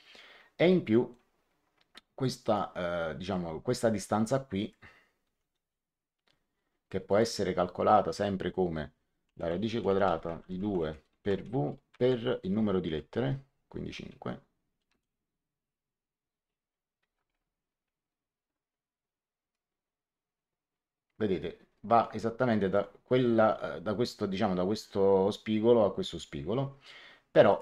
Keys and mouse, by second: 0.6 middle click, 2.5 click, 4.5 click, 5.2 d, 7.0 click, 8.9-11.4 typing, 12.8 5, 14.8 Return, 18.8 Escape, 19.4 click, 27.4 click.